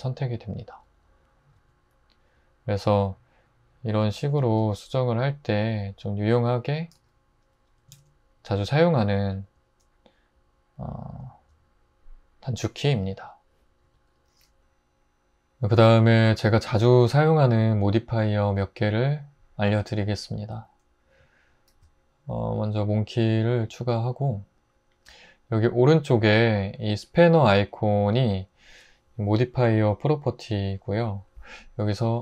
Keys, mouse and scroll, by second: 4.6 g, 6.9 g, 7.9 alt+z, 13.8 Tab, 21.7 shift+a.